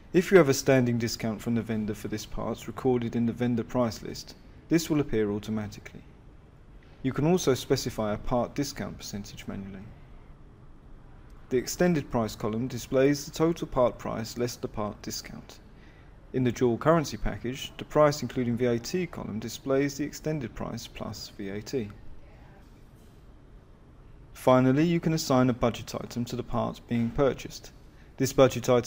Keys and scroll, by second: 26.2 F6.